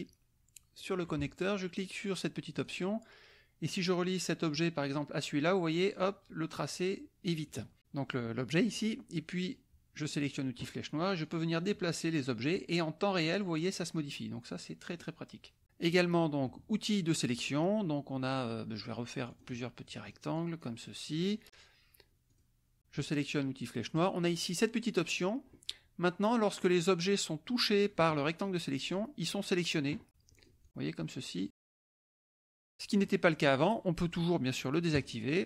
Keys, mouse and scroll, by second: 0.7 click, 2.5 click, 4.3-6.1 drag, 9.4 click, 11.3 click, 11.6 click, 12.5-13.8 drag, 14.0 click, 15.0 click, 16.0 middle click, 17.2 click, 17.7-19.2 middle drag, 19.2 click, 19.8 click, 22.2 click, 26.5-29.1 drag, 30.3-32.3 drag, 32.9 click, 34.9 click.